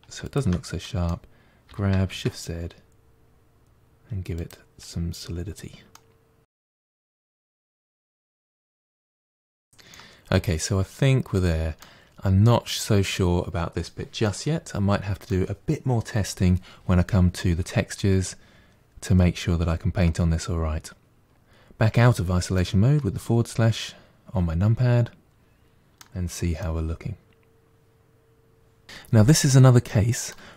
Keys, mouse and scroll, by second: 0.1 shift+click, 0.7 middle click, 1.5 g, 5.8 middle click, 6.6 g, 8.2-9.0 middle drag, 9.0 scroll down 2, 9.1 middle click, 9.4 Tab, 9.6 scroll down 1, 9.7-12.8 middle drag, 14.1-17.1 middle drag, 17.8-20.8 middle drag, 21.3 KP_Divide, 22.4-25.6 middle drag, 26.5-28.8 middle drag, 29.7-30.4 middle drag, 30.4-30.5 scroll up 3.